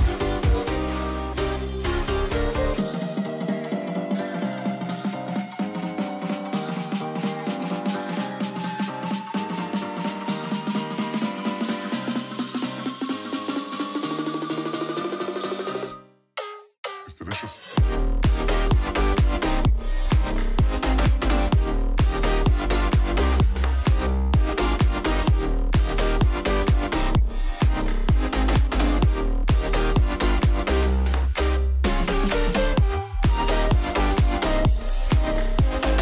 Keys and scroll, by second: 2.0 super+c, 4.4 super+v, 7.9 super+v, 10.1 super+v, 13.1 super+v, 15.7 super+v, 17.8 super+v, 21.5 super+=, 31.9 ctrl+c, 34.3 super+d.